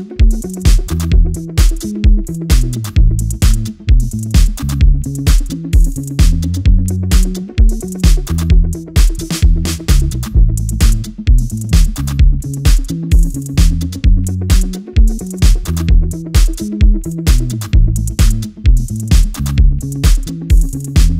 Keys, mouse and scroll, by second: 2.0 KP_0, 2.8-4.1 drag, 4.5 ctrl+t, 7.8-9.8 drag.